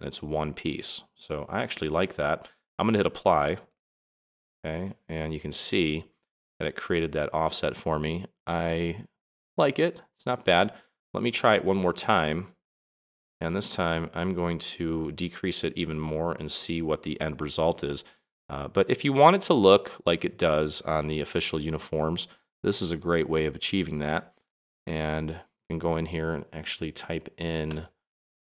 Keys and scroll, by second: 26.3 BackSpace, 27.6 0.